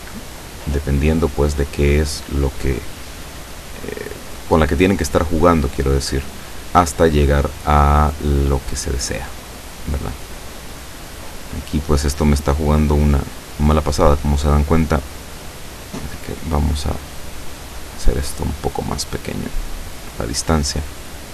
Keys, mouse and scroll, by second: 1.2 click, 3.9 click, 5.0 click, 6.1 click, 9.0 click, 16.1 click, 17.5 click, 18.3 click, 18.6 click, 19.1 click, 20.3 click.